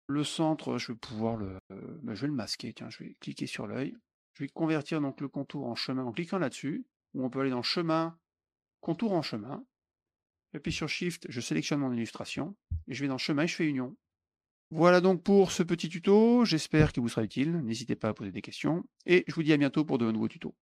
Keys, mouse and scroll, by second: 3.4 click, 3.8 click, 7.7 click, 8.7 click, 11.5 shift+click, 13.0 click, 13.9 click, 14.9 click, 15.3 middle click.